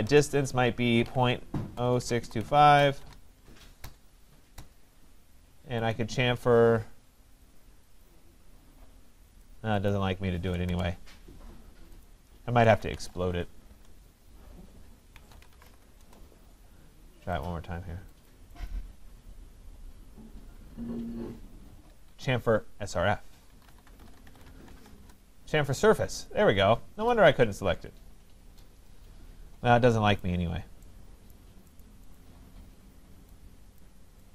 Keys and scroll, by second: 3.8 Return, 10.7 Return, 21.9 Escape, 24.9 Return.